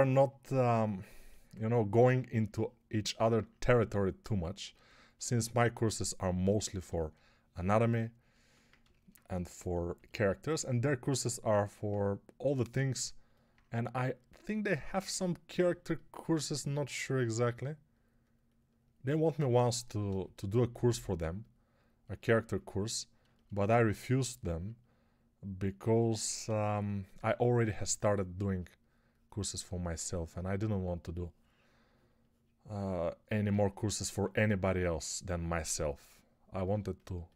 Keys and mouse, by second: 27.1 1, 33.9 2, 36.6 g.